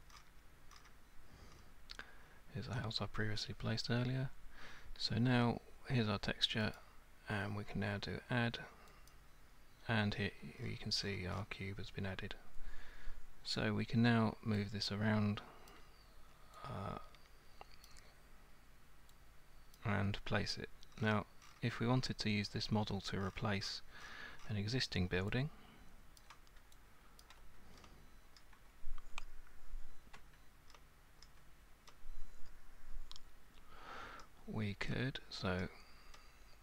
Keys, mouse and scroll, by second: 0.0 scroll up 10, 0.1 middle click, 0.2 scroll, 0.7 middle click, 0.8 scroll, 1.5 middle click, 1.6 middle click, 2.1 scroll up 7, 3.0-3.4 scroll, 3.4-5.1 scroll up 7, 5.1 scroll, 5.7 scroll up 6, 6.7 click, 9.1 click, 10.6-11.8 scroll, 15.7 click, 17.9 click, 19.8 click, 20.9-21.6 scroll, 23.2-24.6 scroll, 26.2 alt+click, 27.2 ctrl+click, 27.8-28.4 ctrl+scroll, 28.4-30.3 ctrl+scroll, 30.7-31.7 alt+scroll, 31.9 ctrl+middle click, 33.6-34.6 alt+scroll, 34.9 alt+scroll, 36.5 alt+scroll.